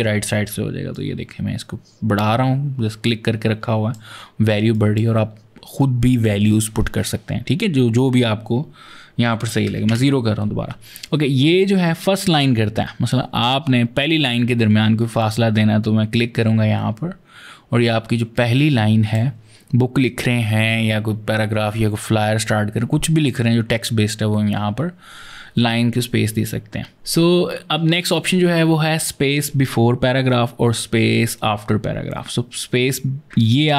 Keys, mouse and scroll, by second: 0.7 click, 4.5 click, 9.4 KP_0, 9.7 KP_Enter, 15.0 click, 33.4 click.